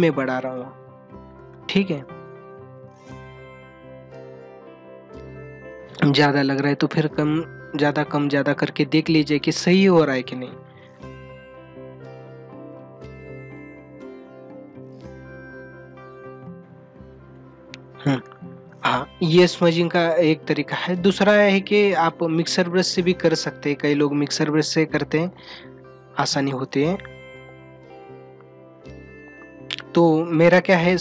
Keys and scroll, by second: 0.0 ], 1.4 space, 2.3 ctrl+=, 2.7 ], 3.3 ctrl+=, 3.6 ], 4.9 ], 6.2 ctrl+alt+z, 8.7 space, 10.9 ctrl+alt+z, 12.3 ], 12.7 space, 18.1 space, 21.3 ctrl+=, 27.6 space, 28.7 ctrl+=.